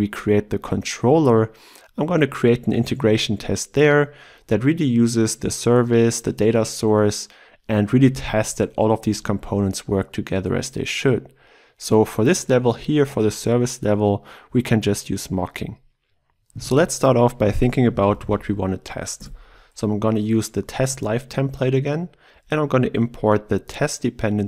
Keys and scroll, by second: 19.2 Tab.